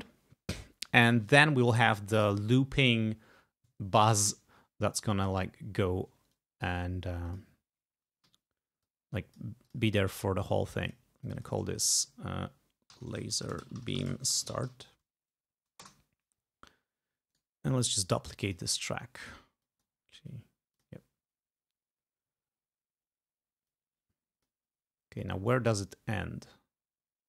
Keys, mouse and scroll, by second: 6.5 click, 7.4 click, 8.4 g, 9.0 click, 9.8 click, 11.0 click, 11.3 click, 12.8-15.3 typing, 15.9 Return, 17.4 right click, 18.6 click, 19.7 click, 20.9 click, 23.8 click, 25.4-27.2 drag.